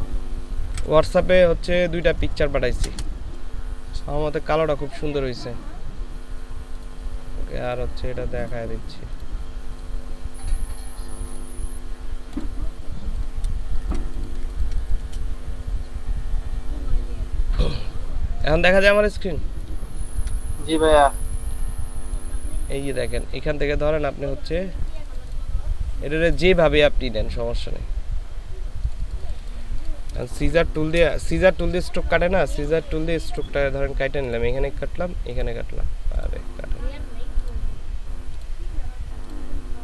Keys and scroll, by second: 0.8 ctrl+v, 2.8 Return, 13.7 ctrl+space, 30.2 ctrl+space.